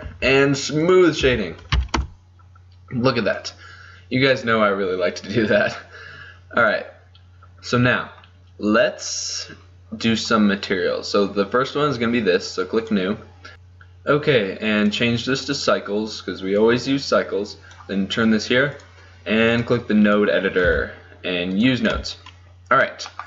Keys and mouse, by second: 0.2 Tab, 1.4 t, 2.0 KP_0, 2.3 click, 7.7 click, 8.3 right click, 9.2 middle click, 10.1-12.9 right drag, 14.1 middle click, 14.9-17.0 drag, 21.6 n.